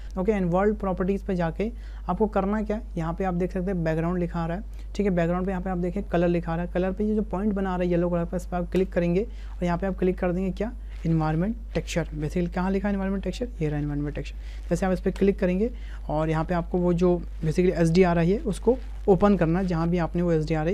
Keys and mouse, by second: 1.7 click, 8.8-15.3 drag.